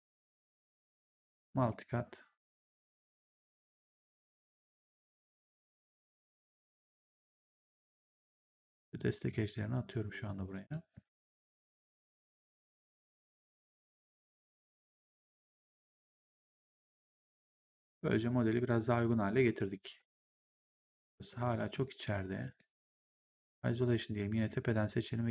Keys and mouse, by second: 1.2 click, 4.1 ctrl+click, 5.7 ctrl+click, 7.4 ctrl+click, 8.8 ctrl+click, 10.5 ctrl+click, 13.3 ctrl+click, 14.9 ctrl+click, 15.3 w, 15.6 right click, 16.9 3, 17.3 click, 18.7 ctrl+1, 20.6 click, 21.2 1, 21.6 right click, 22.8 ctrl+1, 23.2 right click.